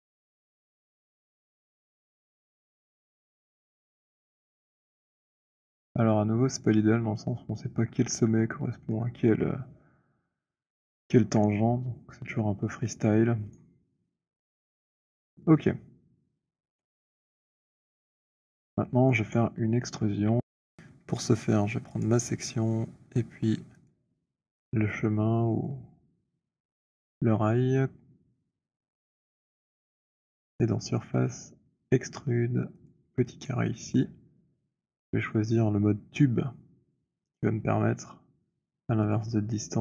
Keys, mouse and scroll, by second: 0.5 click, 6.7 click, 8.1 scroll, 9.3 alt+middle click, 10.7-11.0 scroll, 11.2 alt+middle click, 11.6 alt+middle click, 12.1-13.3 scroll, 13.9 right click, 15.0 click, 18.9-19.5 scroll, 19.5-19.8 scroll, 22.1 click, 23.8 shift+click, 28.8 click, 32.7 click, 39.1 click.